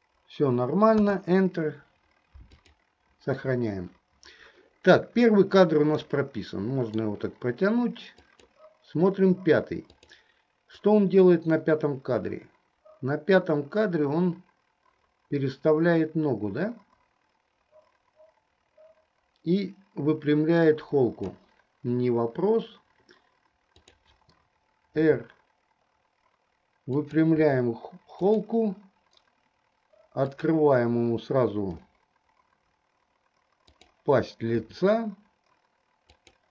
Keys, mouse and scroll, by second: 6.1 middle click, 8.5 click, 10.2 click, 11.1-21.7 drag, 23.8 click, 25.2 r, 27.5 r, 34.0 click, 34.8 r.